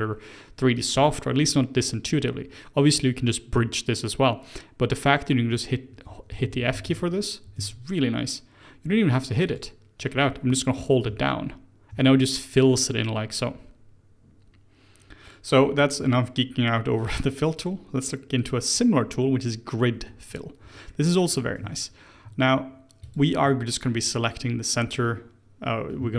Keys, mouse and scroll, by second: 1.0-4.0 scroll down 1, 6.3-6.9 ctrl+z, 7.5 ctrl+z, 9.4 click, 11.0-11.9 f, 17.5 click, 18.3 click, 19.9 Tab, 20.2 click, 20.6 Tab, 20.8-23.0 middle drag, 23.0 alt+click, 24.0-26.1 middle drag.